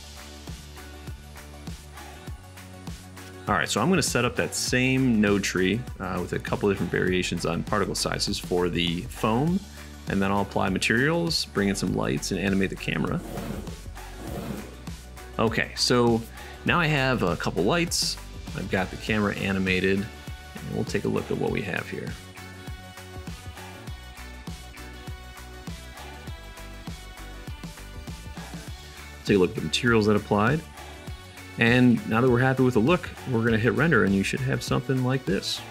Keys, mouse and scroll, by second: 0.3-1.2 middle drag, 2.1-3.3 right drag, 3.3-6.0 middle drag, 7.7 middle click, 8.5-13.5 shift+middle drag, 13.5 shift+middle click, 14.5-15.9 drag, 15.9-17.8 middle drag, 17.8-19.3 drag, 19.3-20.4 middle drag, 20.4 KP_0, 21.6-29.7 middle drag, 29.7 click, 32.5 middle click, 33.1-35.7 drag.